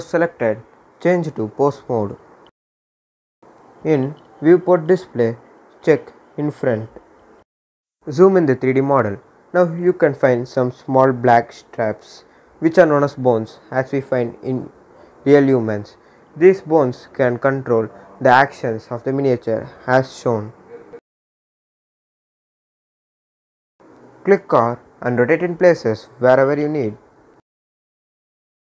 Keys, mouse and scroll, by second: 0.3 click, 2.5 scroll down 1, 2.9 click, 3.6-4.8 scroll down 1, 4.8 click, 5.2-6.7 scroll down 1, 6.7 click, 7.6 scroll up 1, 8.9-10.9 drag, 10.9 scroll down 1, 12.0 click, 13.0 scroll down 1, 15.8 click, 17.3 r, 19.7 click, 21.9 click, 24.5 r, 27.2 click, 28.4 click.